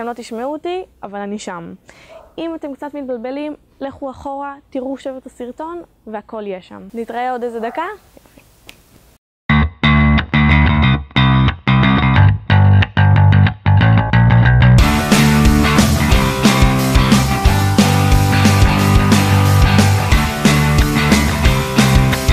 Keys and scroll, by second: 11.5 1, 15.3 a, 15.7 ctrl+Tab, 17.9 b, 21.3 a, 21.9 b.